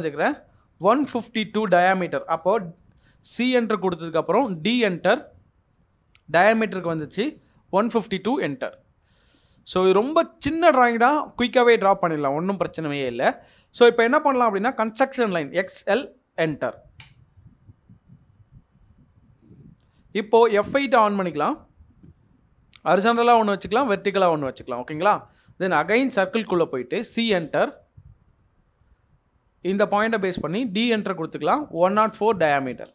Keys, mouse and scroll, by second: 0.9-1.6 typing, 2.8 BackSpace, 5.3 d, 5.8 Return, 7.1-8.3 typing, 8.4 Return, 9.4 middle click, 14.6 typing, 17.0 Return, 17.6 Return, 21.6 F8, 24.3 Escape, 25.8-27.4 typing, 30.6-32.8 typing, 32.8 Return.